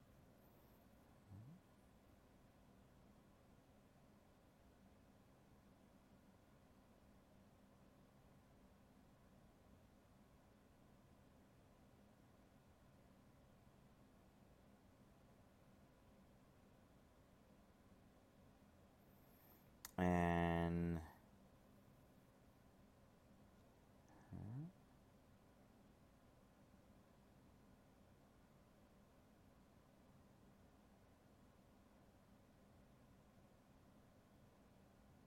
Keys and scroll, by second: 2.3 alt+space, 4.3 alt+space, 5.9 alt+space, 6.9 alt+space, 16.3 alt+space, 24.0 ctrl+z.